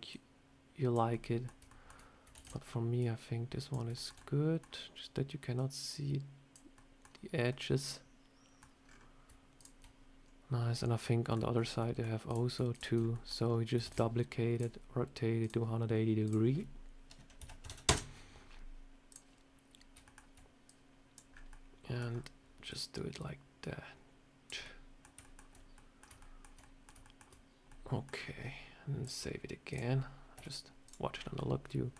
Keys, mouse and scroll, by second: 0.0 click, 1.0 middle click, 1.5 shift+middle click, 2.2 shift+d, 2.9 click, 3.8 shift+middle click, 4.1 middle click, 5.4 click, 6.6 middle click, 7.4 middle click, 8.7 scroll down 5, 9.4 shift+click, 10.9 middle click, 11.2 scroll down 1, 11.4 scroll up 3, 11.7 middle click, 12.2 click, 12.6 click, 12.9 scroll up 2, 13.0 middle click, 13.2 scroll down 3, 13.7 shift+d, 14.4 click, 15.3 click, 15.3 shift+click, 16.1 click, 19.0 click, 19.9 shift+middle click, 20.5 click, 21.2 scroll up 4, 21.4 middle click, 21.9 scroll down 2, 22.6 click, 24.5 middle click, 25.1 shift+middle click, 25.4 scroll up 2, 25.6 middle click, 26.1 shift+middle click, 26.5 middle click, 26.9 shift+middle click, 27.6 middle click, 28.0 scroll down 2, 28.9 click, 30.2 z, 31.0 scroll down 2, 31.2 middle click.